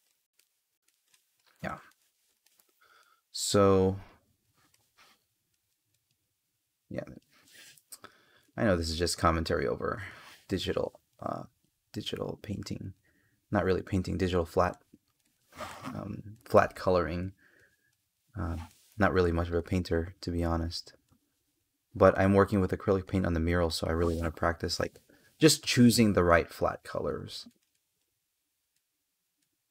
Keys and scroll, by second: 1.5 space, 4.5 space, 7.2 space, 8.8 space, 15.5 space, 18.5 space, 23.6 space.